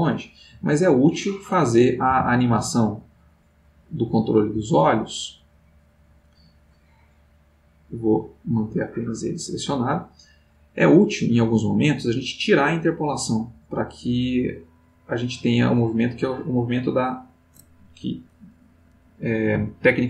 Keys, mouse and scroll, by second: 0.0 click, 1.3 click, 2.1 g, 4.5 Escape, 6.8 middle click, 8.1 click, 8.9 middle click, 9.4 middle click, 13.4-18.7 drag.